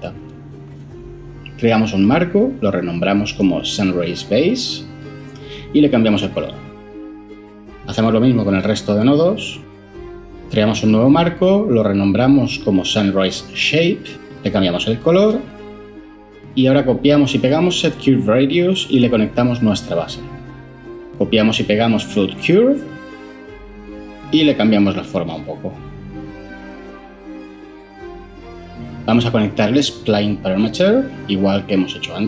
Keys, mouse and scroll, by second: 0.0-0.3 typing, 2.4 ctrl+j, 3.0 F2, 3.7-5.7 typing, 5.7 Return, 10.9 ctrl+j, 11.1 F2, 11.4-13.3 typing, 13.6 Return, 17.5 ctrl+c, 17.9 ctrl+v, 22.4 ctrl+c, 22.7 ctrl+v.